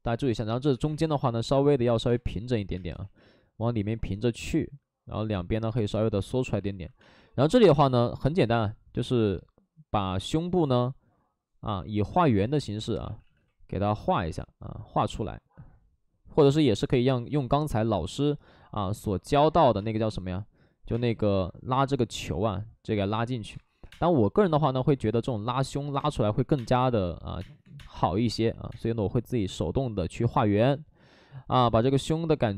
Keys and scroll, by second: 0.5 ctrl+z, 0.7 ctrl+z, 0.9 2, 2.0 space, 2.9 space, 2.9 ctrl+z, 6.7 ctrl+z, 6.9 space, 7.8 space, 13.0 ctrl+z, 13.2 ctrl+z, 19.7 space, 20.8 space, 21.6 space, 23.4 3, 23.8 space, 23.8 3, 26.2-28.6 typing.